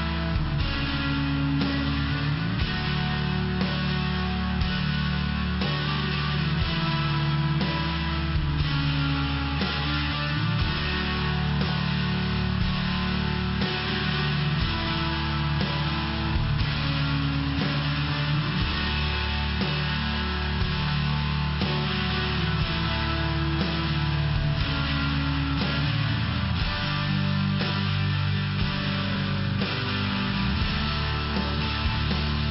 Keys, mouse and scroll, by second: 0.8-1.8 scroll down 2, 2.6 click, 2.7 click, 2.8 click, 2.9 double click, 4.7 click, 4.8 click, 5.7 click, 5.8 click, 6.2 click, 6.6 BackSpace, 7.2 click, 7.7 5, 8.4 Return.